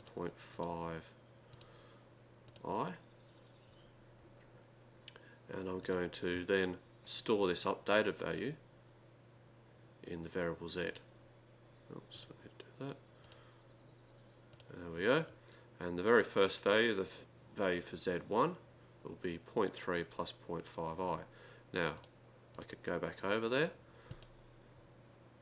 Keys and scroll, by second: 0.2 Right, 0.2 3, 0.5 7, 1.5 Up, 2.5 Up, 5.6-6.4 typing, 11.5-13.9 typing, 14.5 Right, 22.0 Right, 24.1 Delete.